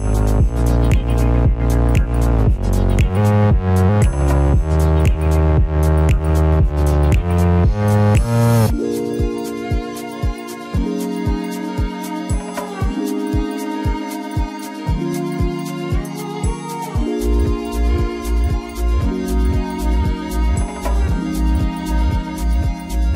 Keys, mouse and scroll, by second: 2.0 shift+click, 5.7 shift+click, 6.6 shift+click, 7.8 shift+click, 8.7 shift+click.